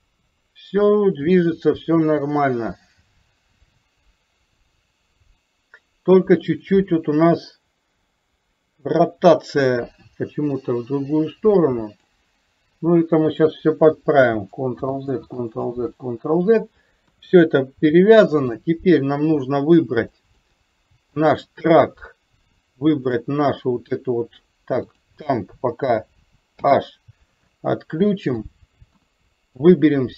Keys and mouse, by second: 14.8 ctrl+z, 15.5 ctrl+z, 17.1 KP_1, 18.6-18.9 middle drag, 20.3 middle drag, 23.1 shift+click, 24.1-24.5 middle drag, 24.8 click, 27.6-28.4 middle drag, 29.1 KP_1, 29.7-30.1 drag.